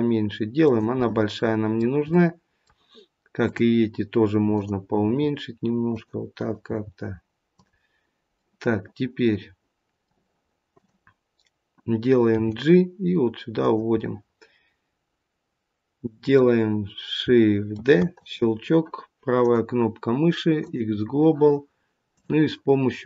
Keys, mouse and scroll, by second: 1.0 middle click, 2.1 middle click, 3.4 click, 4.4 click, 5.0 g, 6.3 click, 6.8 g, 8.3 middle click, 10.6 click, 12.3 g, 13.8 middle click, 17.7 shift+d, 19.3 right click, 22.0 click.